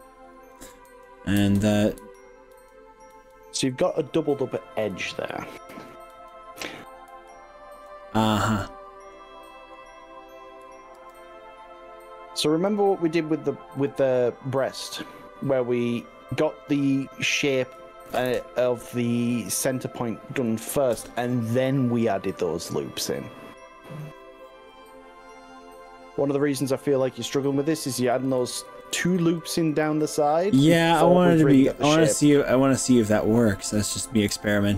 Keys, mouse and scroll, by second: 1.0 ctrl+z, 1.4 ctrl+z, 2.0 ctrl+z, 2.6 ctrl+z, 3.2 ctrl+z, 3.8 ctrl+z, 4.4 middle click, 4.7 click, 5.0 ctrl+z, 5.4 ctrl+z, 5.8 ctrl+z, 6.2 ctrl+z, 6.6 ctrl+z, 7.4 ctrl+z, 7.9-9.2 middle drag, 9.6 middle click, 11.0 ctrl+r, 13.2 right click, 13.8 click, 14.2 middle click, 15.0 click, 16.8 click, 17.2 click, 18.1 ctrl+KP_Add, 18.4 ctrl+KP_Add, 18.8 ctrl+KP_Add, 19.9 middle click, 21.0 ctrl+KP_Add, 26.6 click, 28.2 ctrl+z, 28.4 ctrl+z, 28.8 ctrl+z, 29.0 ctrl+z, 29.2 ctrl+z, 29.6 ctrl+z, 30.0 ctrl+z, 30.2 ctrl+z, 30.4 ctrl+z, 30.8 ctrl+z, 31.6 click, 32.2 click.